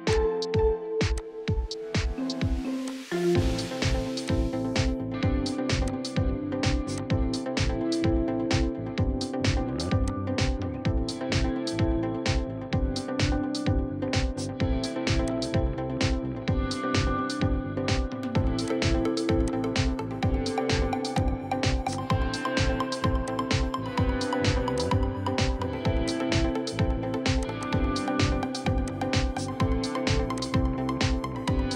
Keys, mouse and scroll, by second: 5.4-5.9 scroll down 1, 9.3 right click, 10.8 scroll up 1, 11.4-12.2 scroll up 1, 12.2 middle click, 13.2-14.3 scroll down 1, 14.4 right click, 16.5 middle click, 17.3-18.7 scroll up 1, 27.7-28.5 scroll up 1, 28.5 double click, 28.9 2.